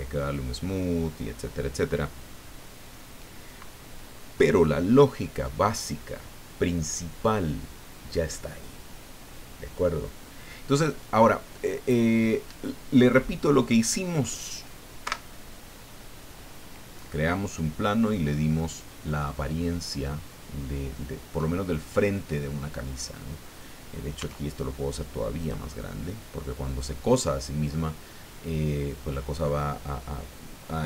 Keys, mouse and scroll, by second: 15.0 Escape, 17.2 middle click, 18.5-21.5 middle drag, 21.5 click, 24.1 s, 25.4 click, 25.8-27.5 drag, 27.5-29.6 middle drag.